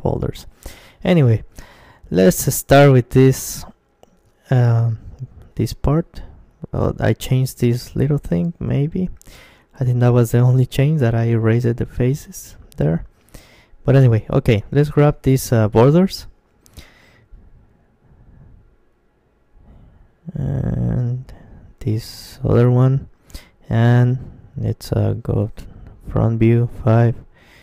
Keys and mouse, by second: 0.2 Tab, 1.1 middle click, 1.7-11.7 middle drag, 14.8-18.2 right drag, 18.4-24.7 middle drag, 21.7-23.5 right drag, 24.7 KP_1, 25.9 KP_5, 26.5 KP_Decimal, 27.1-27.6 middle drag.